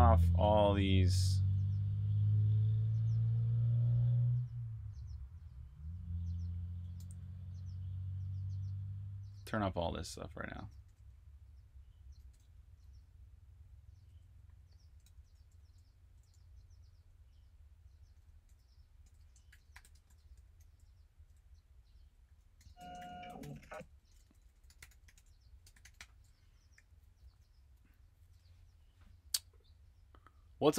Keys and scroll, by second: 1.1 typing, 6.9 typing, 9.1-10.7 typing, 12.2-16.7 typing, 18.0-22.1 typing, 23.9-27.1 typing, 29.2 typing.